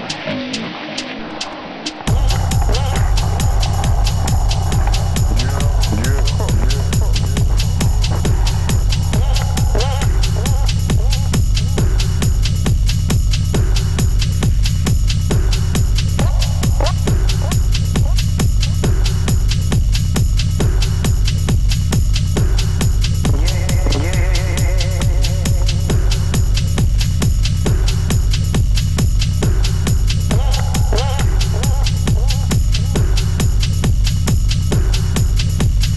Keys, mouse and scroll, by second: 2.2 click, 2.8 scroll down 2, 3.0-3.3 middle drag, 3.3-4.3 scroll up 1, 4.3 d, 4.7 Escape, 5.2 g, 7.1 click, 7.4 middle click, 7.7 scroll up 2, 8.1 middle click, 8.5 click, 9.1 shift+click, 9.7-10.5 scroll up 1, 10.5 click, 11.2 shift+click, 11.3 scroll down 2, 11.5 middle click, 12.5 scroll up 1, 12.6 `, 15.3 shift+d, 17.1-18.2 middle drag, 18.2-18.8 scroll down 1, 18.8 s, 20.0-20.6 shift+middle drag, 20.6 click, 21.2 s, 22.8 click, 23.5 s, 24.5 s, 26.4-27.0 scroll up 3, 27.0-27.7 shift+middle drag, 27.7 shift+drag, 28.2 g, 29.2-31.2 middle drag, 31.6-32.0 scroll down 1, 32.0 click, 32.2-33.1 scroll down 3, 32.4-32.7 middle drag, 33.1-34.2 shift+middle drag, 34.3 click, 34.4-35.2 scroll down 1.